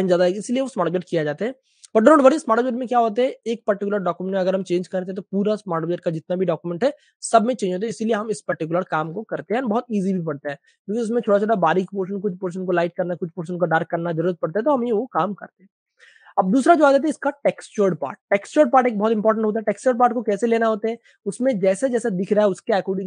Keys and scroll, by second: 1.5 super+space, 8.4-9.3 typing, 10.6 super+space, 11.5 v, 13.9 super+space, 15.5 super+space, 16.0 typing, 17.6 v, 19.4-19.9 typing, 21.2-22.2 typing.